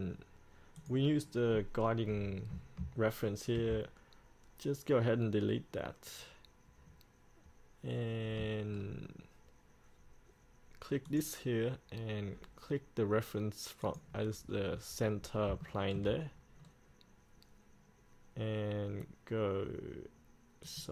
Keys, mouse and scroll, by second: 1.0-2.1 drag, 3.7 Delete, 8.3-8.9 scroll up 1, 8.9-11.2 scroll down 1, 11.2 click, 14.7-15.7 scroll up 1, 15.8 shift+middle click, 16.8-20.8 scroll down 1, 20.8 click.